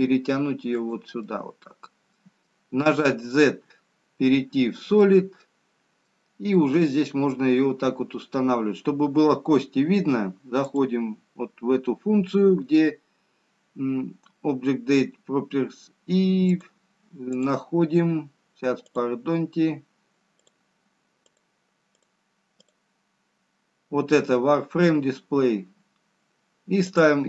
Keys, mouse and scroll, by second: 2.1 middle click, 2.9 z, 5.7 middle click, 9.0-10.3 scroll down 1, 11.1 click, 16.7 click, 18.0 click, 21.1 click, 21.7 click, 22.2 click, 23.0 click, 23.5-24.6 scroll down 2, 27.1 click.